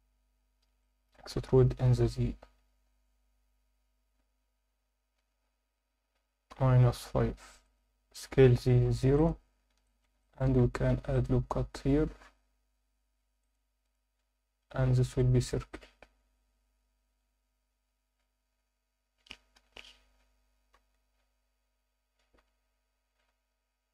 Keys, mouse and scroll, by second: 0.8 alt+middle click, 1.5 e, 1.8 z, 7.6 click, 8.5 z, 8.8 0, 9.2 click, 9.5 scroll up 1, 9.8 alt+shift+middle click, 10.2 ctrl+alt+middle click, 10.8 ctrl+r, 13.4 click, 19.5 KP_7, 22.4 g, 23.3 x.